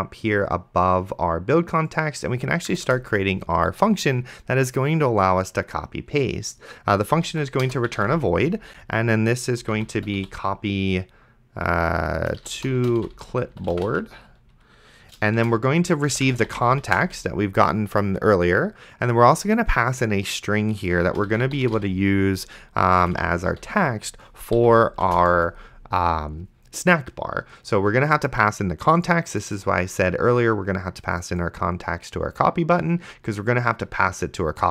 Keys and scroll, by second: 3.0 Return, 7.3-10.7 typing, 12.3-14.4 typing, 15.4-17.4 typing, 21.1-24.9 typing, 24.6 End, 25.3 Return.